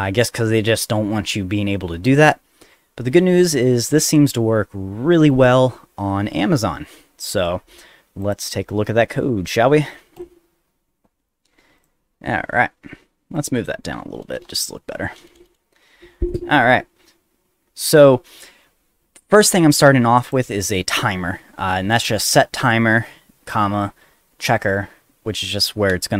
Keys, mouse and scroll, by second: 8.2 click, 10.2 click, 11.8 click, 12.2 middle click, 13.3 click, 14.2 Return, 14.4 Return, 15.2 Return, 15.4 Return, 16.6 click, 17.9 ctrl+s, 19.3 click, 19.5 click, 20.2 click.